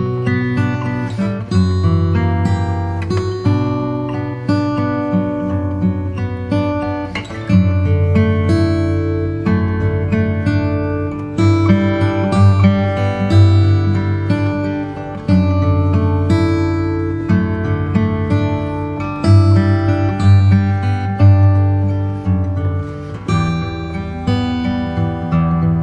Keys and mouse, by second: 0.4 click, 1.5 click, 3.8-7.4 drag, 8.9-12.9 drag, 16.8 click, 18.7-20.8 middle drag, 22.2 click, 23.3 click, 24.8 KP_1.